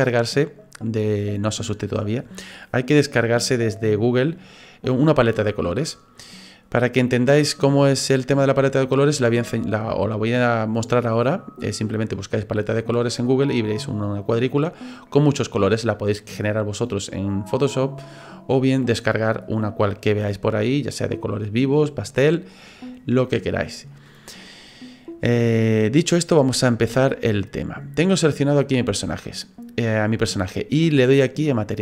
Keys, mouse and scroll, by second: 31.7 click.